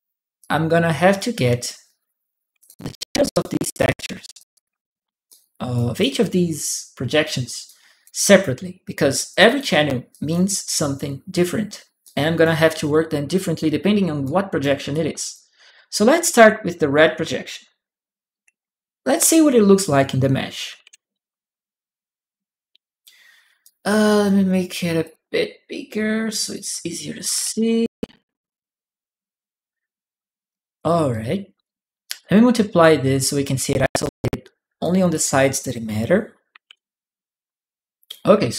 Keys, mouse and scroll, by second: 0.2 click, 2.4 alt+click, 3.1 alt+click, 4.1 alt+click, 5.1 alt+click, 5.1 alt+right click, 7.4 alt+right click, 7.5 alt+click, 9.1 alt+click, 9.9 click, 10.6 click, 11.1 click, 11.8 click, 11.9 right click, 14.0 right click, 14.7 click, 14.8 right click, 18.8 click, 20.6 shift+p, 23.4 click, 24.0 click, 24.8 click, 26.2 shift+click, 30.3 right click, 30.9 right click, 31.4 click, 31.4 right click, 32.6 click, 33.8 click, 34.9 click, 36.5 shift+p, 37.8-38.5 drag.